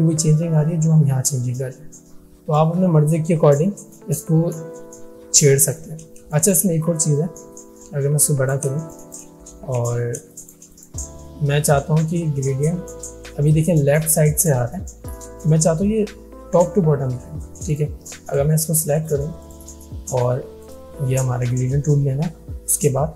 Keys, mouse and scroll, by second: 2.6-3.9 drag, 6.3 space, 6.4 click, 8.2-8.8 click, 8.8 space, 9.0 click, 9.9 alt+scroll down 1, 10.3 space, 10.3 click, 17.8 click.